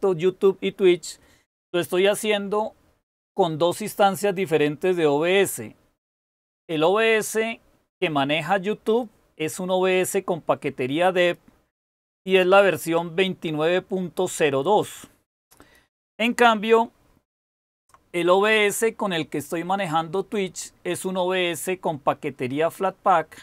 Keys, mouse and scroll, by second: 17.6 super+w.